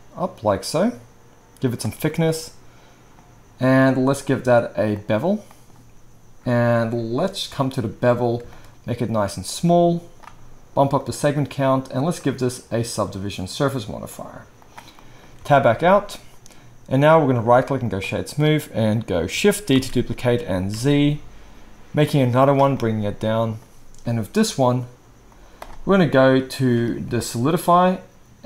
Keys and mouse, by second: 15.4 Tab, 19.8 shift+d, 22.5-25.6 drag.